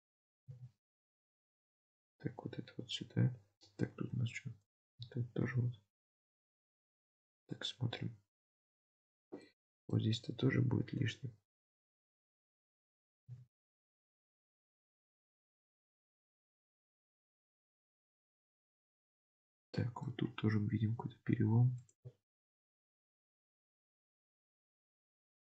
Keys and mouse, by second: 0.6 g, 4.0 alt+z, 5.4 g, 6.5 alt+z, 6.8 Tab, 7.4-9.1 middle drag, 9.0 Tab, 9.5 middle click, 13.2 g, 15.2 Tab, 15.6-17.1 middle drag, 17.2 Tab, 18.3 Tab, 18.6-20.0 middle drag, 20.6 Tab, 24.1 alt+z.